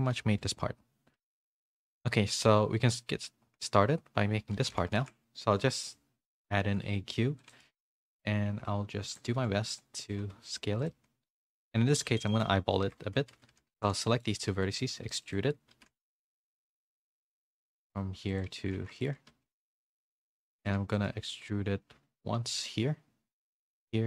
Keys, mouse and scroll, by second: 1.1 z, 1.6 shift+middle click, 4.9 a, 6.6 s, 7.9 r, 9.3 s, 10.2 g, 10.9 s, 11.5 g, 12.3 shift+middle click, 12.8 Tab, 13.0-14.5 typing, 15.6-20.5 typing, 20.0 shift+middle click.